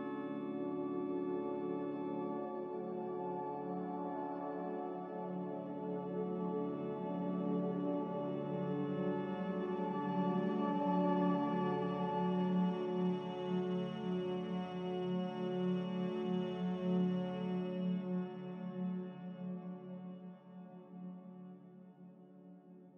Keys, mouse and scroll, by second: 3.2 Escape, 9.6 Delete, 11.7-12.6 typing, 19.2 Delete.